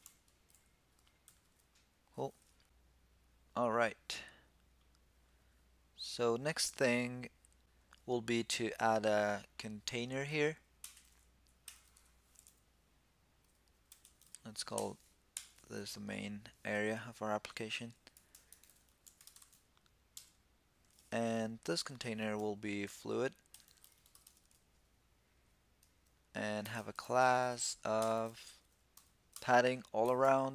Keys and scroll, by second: 1.0 super+s.